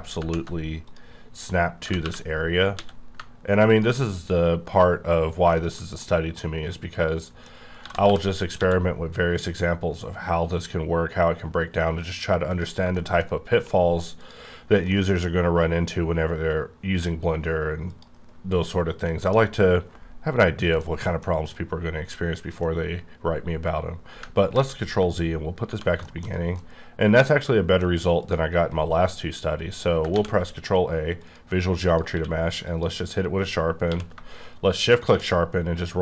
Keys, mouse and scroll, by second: 0.2 ctrl+shift+Tab, 0.7 click, 1.8 g, 2.0 y, 2.7 x, 3.7 ctrl+click, 4.1 scroll down 2, 4.6-5.1 scroll up 2, 5.1 scroll down 2, 5.5 shift+middle click, 7.4 scroll up 2, 7.8 g, 8.0 y, 8.6 x, 12.9 middle click, 13.2-13.9 scroll down 3, 14.2 click, 14.9 middle click, 17.9 middle click, 18.5-19.2 scroll up 1, 19.3 scroll up 1, 19.6-20.8 scroll down 2, 20.8 middle click, 21.9-23.7 scroll up 1, 23.8-24.2 scroll up 2, 24.5 ctrl+z, 25.2-26.3 scroll down 5, 25.7 1, 26.0 shift+middle click, 26.6 middle click, 28.2 click, 29.7 scroll up 1, 30.1 ctrl+a, 31.2 click, 31.9 click, 32.1 q, 32.6 click, 33.8 q, 35.0 shift+click, 35.4 scroll down 4.